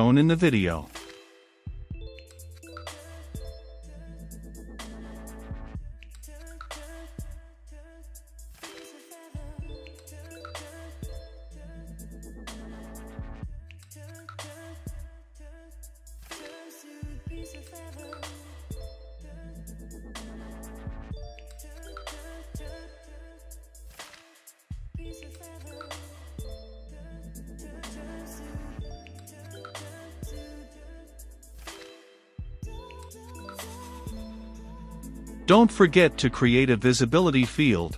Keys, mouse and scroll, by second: 0.0-6.0 typing, 2.5 Return, 3.8 Return, 4.8 Return, 5.6 Return, 6.5 Return, 7.2-10.9 typing, 8.4 Return, 8.6 ctrl+space, 8.8 Return, 9.2 Return, 10.1 Return, 11.1 Return, 12.0-16.7 drag, 16.7 Return, 19.2-19.7 typing, 20.9 Return, 24.9 shift+`, 26.4 c, 27.9 click, 28.1 Return, 28.3 w, 28.5 i, 28.8 h, 29.5 Return, 30.2 ctrl+z, 31.8 Return, 32.0 d, 33.1 Return, 37.4 v, 37.5 i, 37.6 s.